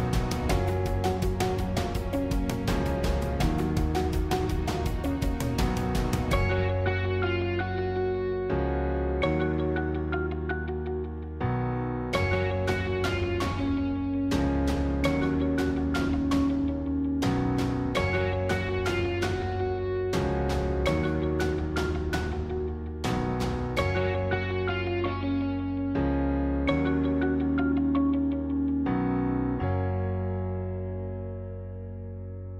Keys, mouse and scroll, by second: 0.4 g, 4.5 click, 12.8 s, 17.7 g, 21.0 click, 24.1 s, 29.1 g.